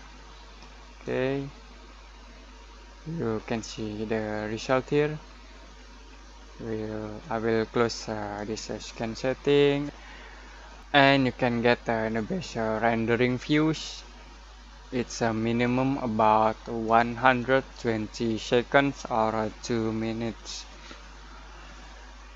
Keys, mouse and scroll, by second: 8.3-10.8 drag.